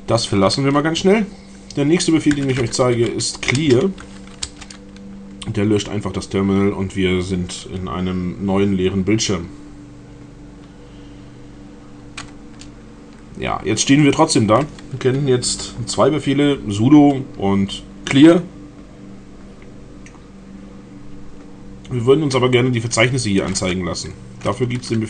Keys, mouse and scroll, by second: 1.9-4.1 typing, 4.4 Return.